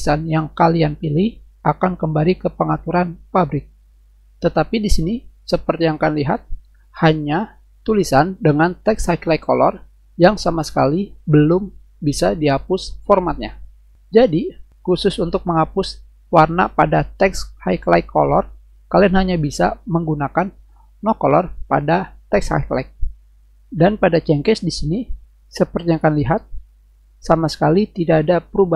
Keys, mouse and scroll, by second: 10.1 click, 20.0 click.